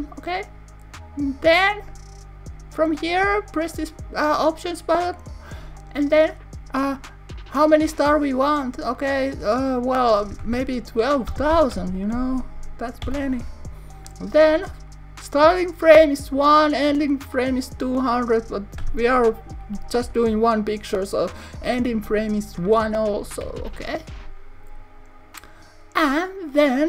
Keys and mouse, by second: 5.0 click, 7.4-14.6 drag, 18.2 click.